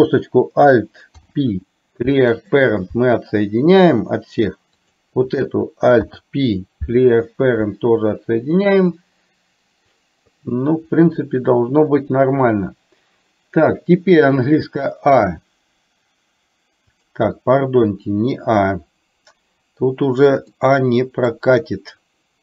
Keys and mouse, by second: 1.2 alt+p, 4.8 click, 6.1 alt+p, 16.9 click, 20.7 middle click.